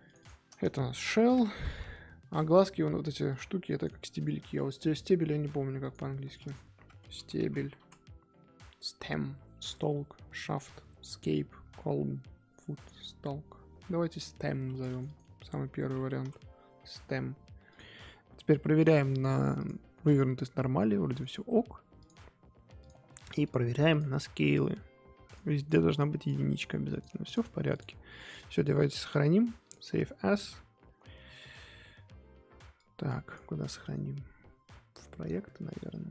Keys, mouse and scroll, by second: 0.0 click, 0.2-1.7 drag, 1.7 l, 3.7 click, 14.9 click, 15.0-17.7 drag, 18.7-20.0 drag, 20.0 scroll down 1, 20.1-22.0 middle drag, 22.0-23.1 drag, 23.1-23.4 middle drag, 23.4 click, 23.9 click, 25.3 click, 25.7-26.2 scroll up 1, 26.2 click, 26.5 click, 26.9 click, 27.2 click, 27.7 click, 28.9-36.1 drag.